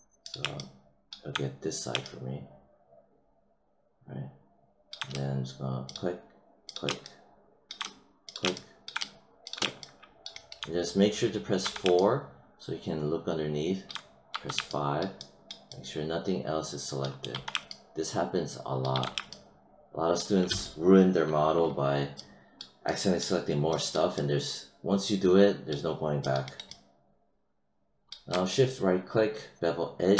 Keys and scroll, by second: 11.5 4, 14.2 5, 17.2 4, 18.8 5.